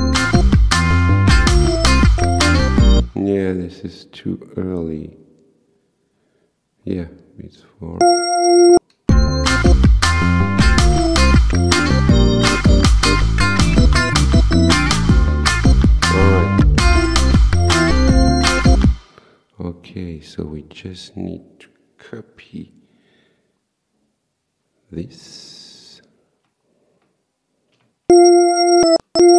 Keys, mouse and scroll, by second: 3.0 space, 8.0 click, 9.1 space, 18.9 space, 25.3 click, 27.7 ctrl+c, 28.1 ctrl+v.